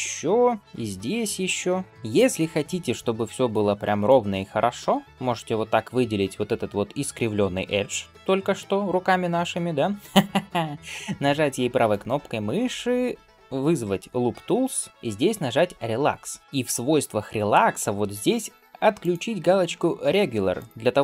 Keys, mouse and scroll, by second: 3.9 alt+click, 11.7-16.4 right drag, 16.4 click, 18.8-21.0 drag.